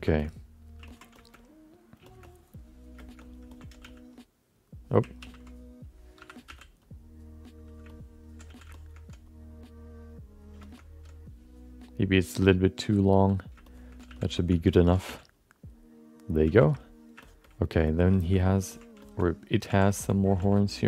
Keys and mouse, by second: 0.2 alt+middle click, 0.8 ctrl+alt+middle click, 1.1 shift+middle click, 1.3 alt+middle click, 2.1 shift+middle click, 2.2 alt+middle click, 3.0 alt+shift+middle click, 3.2 alt+middle click, 3.5 ctrl+alt+middle click, 3.8 f, 4.2 click, 5.4 ctrl+z, 6.2 5, 6.4 f, 6.9 click, 7.9 alt+middle click, 8.6 f, 8.7 alt+shift+middle click, 9.4-10.6 drag, 10.7 alt+middle click, 11.6-13.5 drag, 13.7 shift+middle click, 14.1 f, 14.4 alt+shift+middle click, 14.7 ctrl+alt+middle click, 15.0 f, 15.4 click, 16.4 f, 16.8 middle click, 17.2 middle click, 17.4 alt+middle click, 18.1 shift+middle click, 18.3 middle click, 18.7 ctrl+alt+middle click, 19.0 alt+shift+middle click, 19.2 alt+middle click, 19.7 f, 19.9 alt+shift+middle click, 20.4 f, 20.7 click.